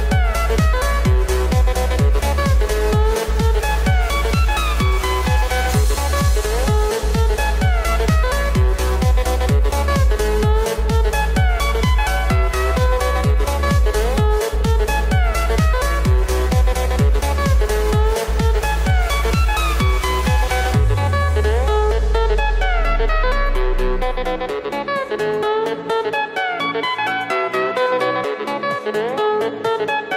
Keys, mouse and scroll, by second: 2.7 click, 3.2 click, 3.7-4.3 middle drag, 4.9 click, 5.9 g, 7.2-7.5 drag, 7.6 g, 8.6 click, 10.4 click, 10.9 click, 12.7 click, 14.0 click, 15.9 click, 16.9 click, 18.2-20.0 drag, 20.3 click.